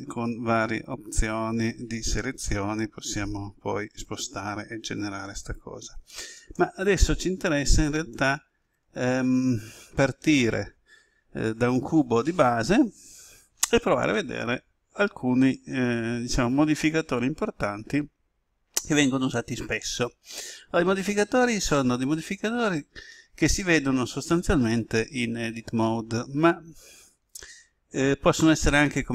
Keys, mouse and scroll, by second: 0.6 shift+right click, 3.1 g, 5.4 right click, 7.6 Tab, 8.3 ctrl+z, 8.6 ctrl+z, 8.8 ctrl+z, 9.1 ctrl+z.